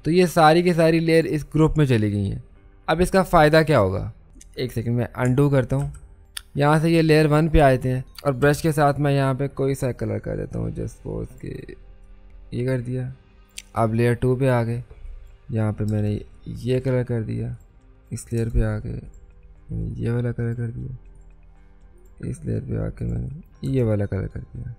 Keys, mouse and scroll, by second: 5.8 ctrl+z, 6.2 click, 8.4 b, 10.4 right click, 11.2 click, 15.9 Return, 16.3 click, 18.4 Return, 19.0 click, 23.7 Return, 24.3 click.